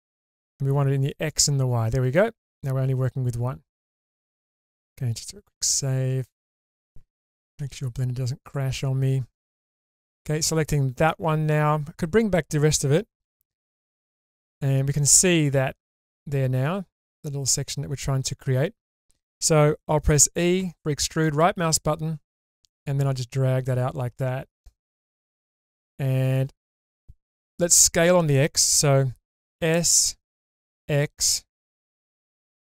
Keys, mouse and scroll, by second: 0.0 click, 1.2 click, 2.1-4.0 middle drag, 4.5 shift+middle click, 5.5 ctrl+s, 7.6 2, 8.4 click, 9.4 alt+click, 10.1-11.1 middle drag, 13.2 /, 15.5-16.2 scroll up 2, 18.3 shift+middle click, 20.6 e, 21.2 right click, 22.5 click, 29.5 s, 30.7 x.